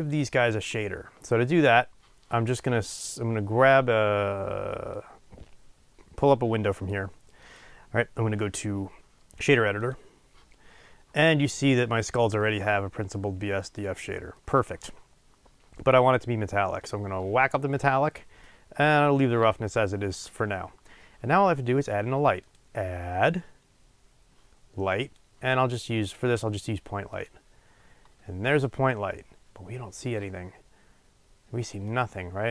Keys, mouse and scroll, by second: 5.3-32.5 drag.